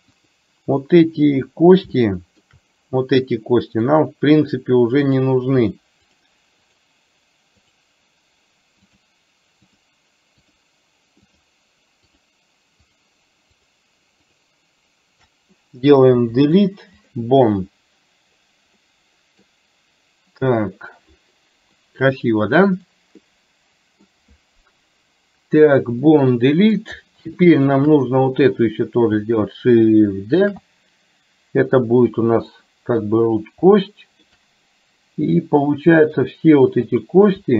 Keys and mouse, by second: 0.3 click, 0.8 middle click, 2.1 shift+middle click, 3.9 click, 5.2 click, 6.8 shift+click, 7.7 shift+click, 8.9 shift+click, 10.4 shift+click, 12.2 shift+click, 12.8 shift+click, 13.6 shift+click, 14.4 shift+click, 16.3 Delete, 18.9 middle click, 21.8 middle click, 22.7 middle click, 23.3 middle click, 26.1 middle click, 27.4 shift+middle click, 28.6 click, 30.6 shift+d, 33.8 shift+middle click, 35.4 middle click, 36.9 click.